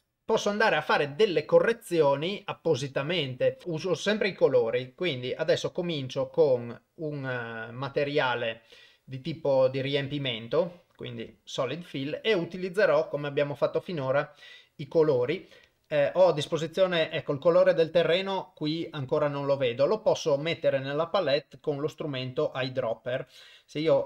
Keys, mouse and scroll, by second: 10.4 click, 15.7 click, 23.9 click.